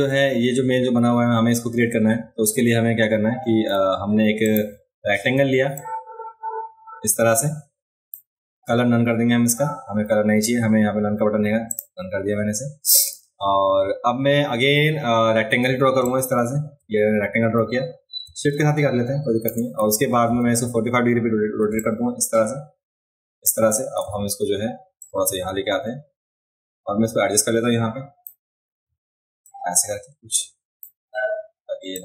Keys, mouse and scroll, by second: 1.7 click, 4.4 click, 5.8-8.1 drag, 11.7 click, 16.0-19.5 shift+drag, 20.3 v, 21.8-23.4 shift+drag, 24.0 v, 25.0-28.2 drag, 29.4-30.8 drag, 31.9-32.0 drag.